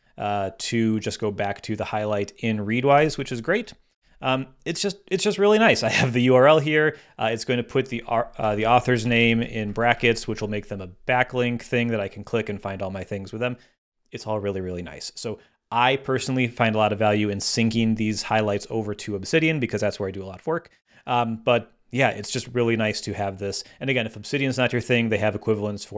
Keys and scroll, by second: 2.9 super+w, 3.9 super+h, 8.4 Left, 8.9 alt+Left, 9.6 alt+shift+Right.